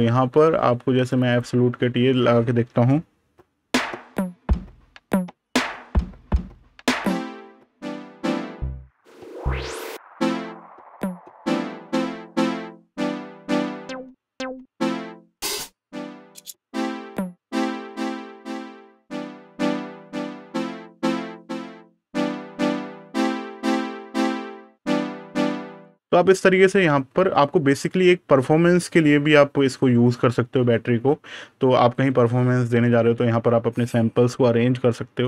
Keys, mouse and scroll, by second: 0.9 click, 2.2 super+KP_Subtract.